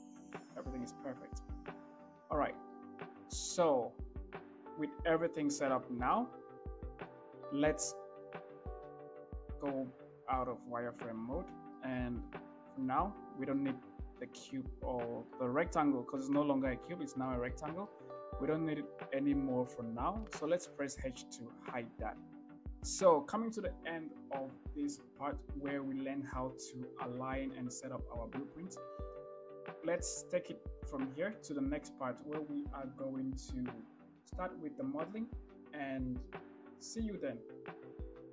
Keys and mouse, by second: 1.0 KP_3, 2.3 shift+middle click, 5.3 Tab, 8.2 shift+z, 9.9-11.3 middle drag, 12.3-13.1 middle drag, 14.0-14.9 middle drag, 15.8-16.8 middle drag, 17.1-17.5 middle drag, 18.1-19.2 middle drag, 21.3 h, 22.4-23.1 drag.